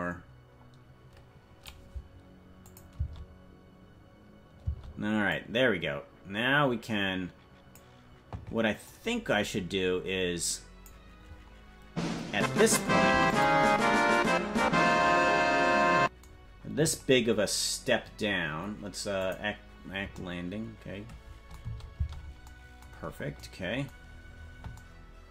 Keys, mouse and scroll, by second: 2.6 click, 2.9 space, 5.0 space, 5.3-7.8 drag, 8.8-10.9 drag, 13.1 i, 19.2 click, 21.6 space, 22.4 space, 23.0 scroll up 3.